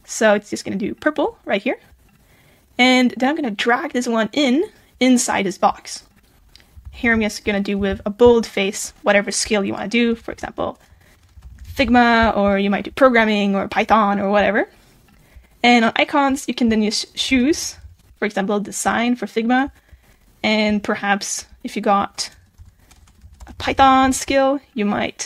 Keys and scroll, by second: 6.8 super+b, 23.8 super+a.